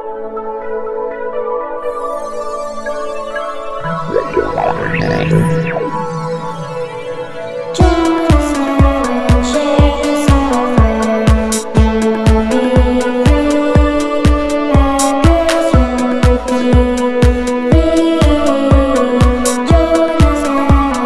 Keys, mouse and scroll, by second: 0.0 click, 1.2 click, 3.4 click, 4.0 click, 4.7 click, 5.7 click, 8.6 click, 9.5 click, 10.4 click, 13.0 click, 14.0 click, 17.1 ctrl+scroll up 2.